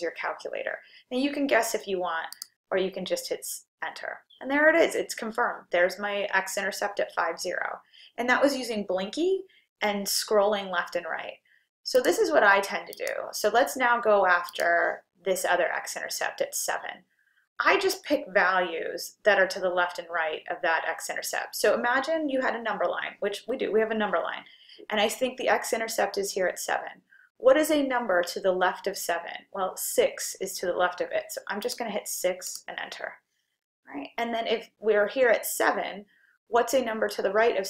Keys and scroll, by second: 2.4 Return, 14.5 2, 31.7 6, 32.5 Return.